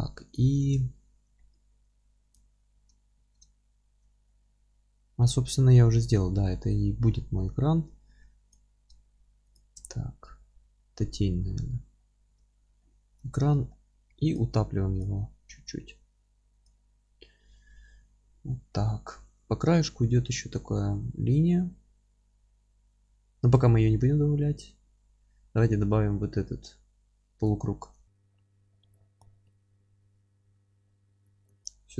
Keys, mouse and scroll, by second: 0.3 click, 0.5 scroll up 1, 0.8 alt+z, 1.3-5.7 middle drag, 2.0 alt+z, 3.1 Tab, 3.7 alt+z, 5.7-6.4 scroll up 2, 6.4 1, 8.2 2, 8.5 click, 9.4 alt+shift+click, 10.2 g, 12.0-12.3 scroll down 2, 12.3 Tab, 12.8-14.3 alt+middle drag, 13.2 Tab, 14.1 3, 14.3 click, 15.4 e, 18.7-28.9 middle drag, 28.0 Tab, 28.1 scroll down 1, 28.4 scroll up 1, 28.9 click, 29.1-29.4 scroll up 1, 29.4 KP_7, 30.1-30.5 scroll up 1, 30.5-31.2 scroll down 1, 31.2 click.